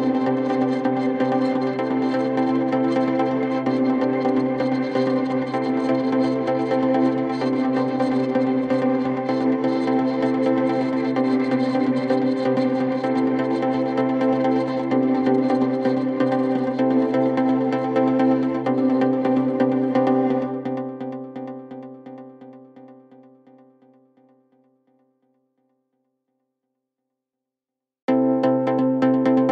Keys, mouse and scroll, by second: 0.3 Delete, 0.6 Delete, 0.7-2.6 scroll down 16, 2.7-3.0 scroll up 3, 3.2 Delete, 3.2 middle click, 3.8 s, 3.9-4.2 scroll up 18, 5.2-5.7 scroll down 19, 5.7 middle click, 6.2 scroll up 8, 6.5 middle click, 6.7-7.5 typing, 8.2-8.7 scroll up 7, 9.1 scroll up 11, 9.9-10.2 scroll down 4, 10.2-11.5 typing, 10.8-11.1 scroll down 3, 13.0-14.3 typing, 14.0 scroll down 8, 14.5 middle click, 15.7 scroll up 7, 16.5 m, 17.1 scroll down 4, 17.3 middle click, 17.6 space, 17.7-18.2 scroll up 7, 18.2 m, 19.1-19.9 scroll down 21, 19.9 m, 20.7 middle click, 21.0 scroll up 4, 21.6 ctrl+s, 22.6 scroll down 6, 22.8-23.1 scroll up 9, 23.4 r, 24.1-24.5 scroll down 17, 24.5-24.9 scroll up 20, 25.1 scroll down 1, 26.9 scroll up 1, 29.4 scroll down 9.